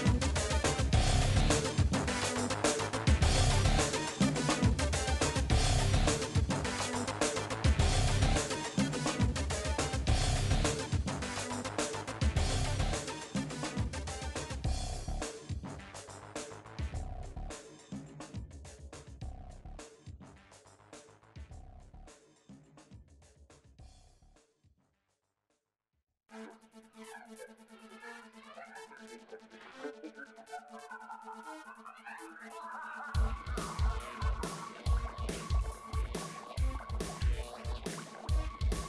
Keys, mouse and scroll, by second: 1.0 click, 1.7-5.6 right drag, 5.6 middle click, 6.1 click, 6.4 right click, 6.9 KP_7, 7.1 scroll up 3, 7.3 shift+middle click, 7.8 g, 8.9 click, 9.1 scroll up 4, 9.3 shift+middle click, 9.5 g, 10.6 click, 11.3 g, 12.0 middle click, 12.7 shift+click, 13.2 f, 13.5 shift+middle click, 14.0 scroll down 1, 14.3 click, 14.8 scroll down 4, 15.1 middle click, 16.3 g, 16.8-17.2 scroll up 4, 17.2 click, 17.9 f, 18.4-19.4 drag, 19.4 f, 19.6 middle click, 19.9 click, 20.5 f, 20.9 click, 21.1-25.0 middle drag, 25.0-25.5 scroll down 4, 25.5 click, 25.7-28.7 shift+middle drag, 28.9 shift+click, 29.5-30.4 scroll up 4, 29.6 shift+middle click, 30.4-31.5 drag, 31.5 right click, 32.6 click, 33.0 KP_1, 33.5 g, 34.0 shift+middle click, 34.8 shift+click, 35.2 f, 35.3 middle click, 35.7 2, 35.8 shift+click, 36.2 f, 36.3-36.7 scroll down 4, 36.7 click, 37.1 middle click, 38.6 shift+middle click.